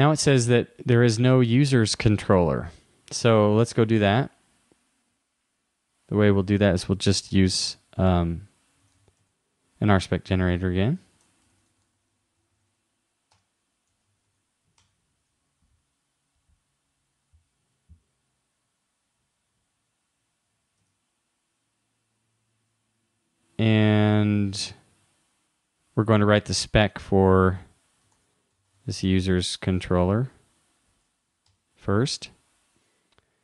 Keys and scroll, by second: 11.5 shift+-, 20.8 super+Tab, 27.3 super+w, 28.2 super+t, 29.4 shift+-.